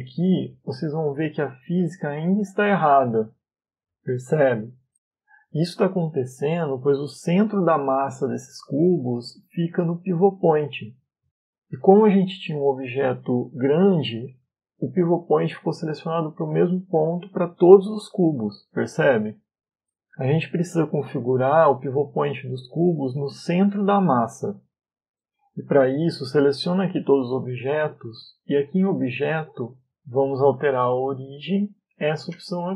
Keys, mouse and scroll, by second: 0.2 middle click, 2.1 click, 3.0 click, 9.3 click, 11.2 click, 12.1-12.9 scroll up 4, 14.1 right click, 14.8 right click, 15.4 middle click, 16.6 right click, 17.2 right click, 21.0 scroll down 1, 21.4 middle click, 22.2-22.8 scroll down 3, 24.7 right click, 26.1 a, 29.4 click.